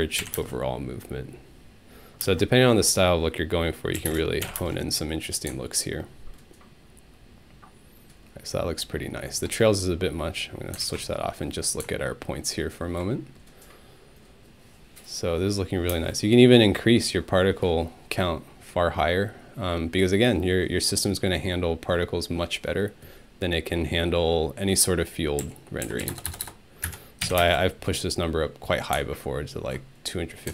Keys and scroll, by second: 0.0-0.4 typing, 0.2 Home, 2.2 space, 4.0 5, 4.1 Return, 4.4 Home, 4.6 space, 15.9 space, 25.2-27.4 typing, 27.2 Home.